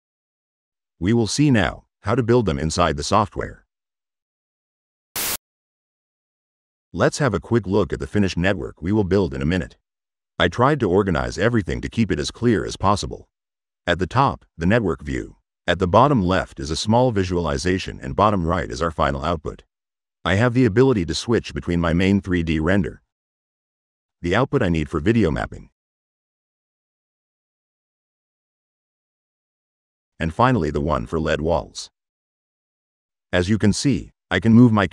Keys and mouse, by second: 20.3-23.3 drag, 24.9 click, 26.1-30.0 drag, 31.0 drag, 32.0 click, 34.7-34.9 drag.